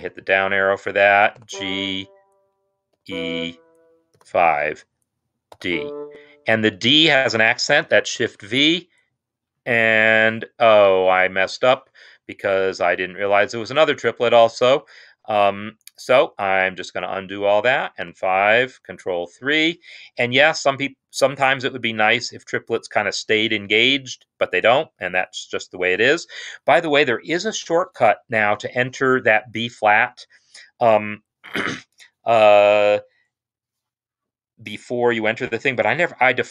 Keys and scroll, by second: 1.1 typing, 2.9 typing, 4.1 typing, 5.4 typing, 7.9 shift+v, 9.0-9.8 typing, 10.5 ctrl+z, 11.1 ctrl+z, 12.5 ctrl+z, 13.2 ctrl+z, 15.7 ctrl+z, 15.8 ctrl+z, 17.8 5, 18.8 ctrl+3.